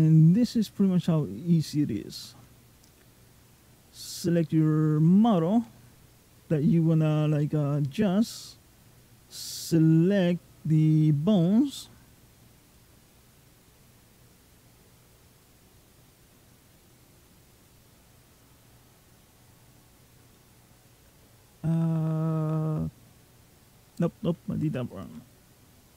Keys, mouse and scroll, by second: 0.5 middle click, 2.7 click, 3.3 click, 8.5 shift+click, 11.8 click, 19.0-19.4 scroll down 2, 19.4-20.0 scroll up 1, 20.2 middle click, 24.7 click.